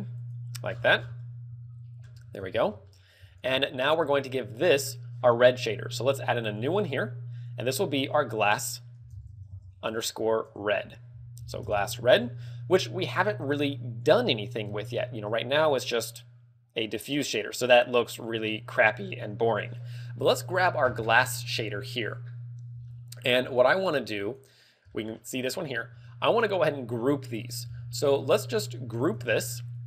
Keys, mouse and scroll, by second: 0.1 alt+shift+right click, 0.6-1.0 scroll down 11, 1.4 KP_1, 1.9 z, 2.3 ctrl+KP_1, 2.8 shift+middle click, 3.1 scroll up 4, 3.3 z, 3.6 shift+middle click, 4.0 middle click, 6.4 click, 6.6 click, 7.3 click, 8.3 click, 13.9 click, 14.1 click, 14.8 Tab, 20.6 right click, 21.5-22.1 scroll down 7, 22.7 middle click, 24.2 click, 24.8 middle click, 25.2 scroll down 3, 25.5 middle click, 25.8 a, 27.5 b, 29.1 ctrl+g, 29.4 scroll up 4.